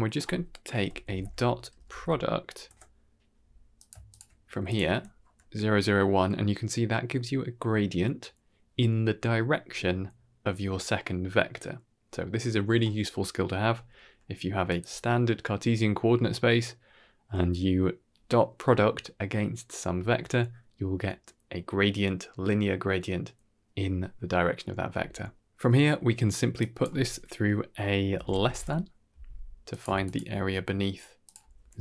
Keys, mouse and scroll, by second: 4.5 click, 14.6 click, 14.9 ctrl+h, 25.4-25.7 scroll down 3, 25.7 middle click, 26.5-29.7 drag, 28.3 s, 30.0 ctrl+shift+click, 31.1 click.